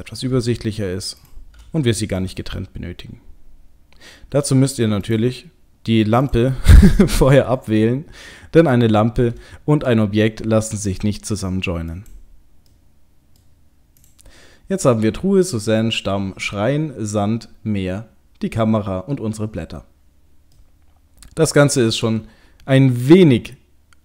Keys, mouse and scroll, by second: 1.2 shift+click, 1.5 shift+click, 2.2 right click, 5.1 click, 6.3 click, 6.9 middle click, 8.7 shift+click, 8.9 shift+click, 10.9 right click, 12.0 click, 12.8 middle click, 13.4 middle click, 14.0 click, 20.6 middle click, 23.2 middle click.